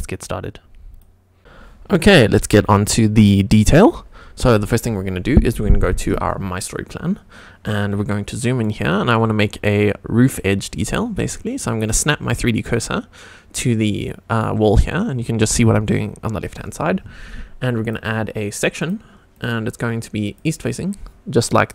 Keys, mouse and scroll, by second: 4.7 click, 7.6 scroll up 2, 8.1-8.6 shift+middle drag, 8.9 shift+right click, 15.0 click, 15.5 drag, 17.8-18.9 drag, 19.3-20.4 drag.